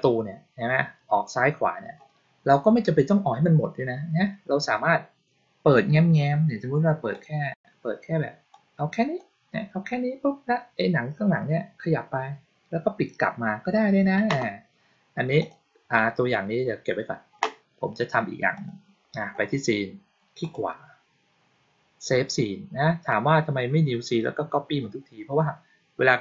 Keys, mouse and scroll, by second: 7.0 click, 8.4-9.0 drag, 15.2 click, 18.4 click, 20.3 right click.